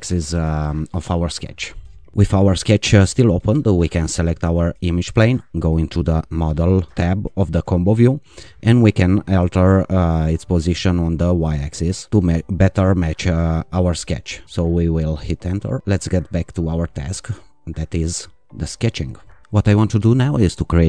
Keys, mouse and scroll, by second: 4.3 click, 6.0 click, 10.8 click, 12.1 Down, 14.4 Return, 16.9 click, 19.4 ctrl+r.